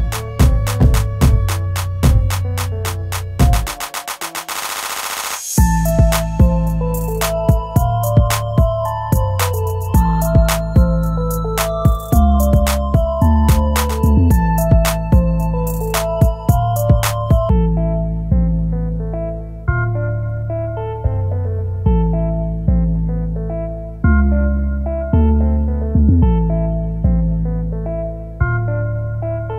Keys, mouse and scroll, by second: 1.6 scroll up 1, 8.5 shift+right click, 10.6 scroll up 1, 12.0 scroll up 1, 12.2 ctrl+z, 16.6 shift+Page_Down.